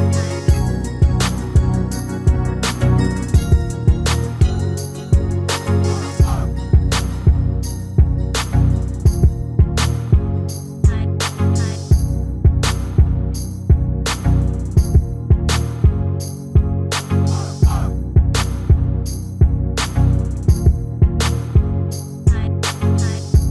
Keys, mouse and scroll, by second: 2.8 s, 3.1 a, 3.3 s, 4.9 r, 6.7-8.3 middle drag, 9.4 click, 9.9 s, 10.2 x, 10.5 a, 10.7 s, 11.9 click, 13.5-14.8 middle drag, 14.8 r, 16.1-17.2 drag, 16.4 right click, 16.9 s, 17.2 a, 17.4 s, 19.8 click, 22.2 s.